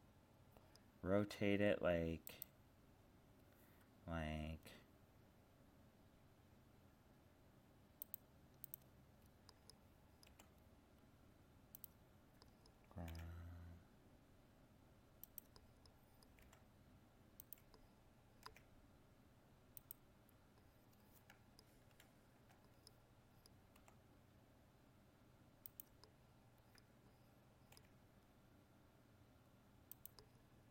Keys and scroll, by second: 21.9 ctrl+-.